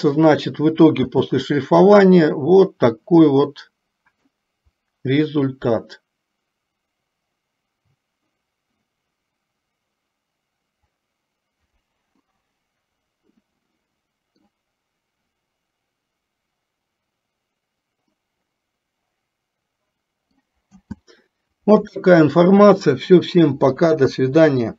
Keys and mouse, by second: 1.2 space, 3.7 middle click, 12.3-14.7 middle drag, 18.5-20.6 middle drag, 21.0 space.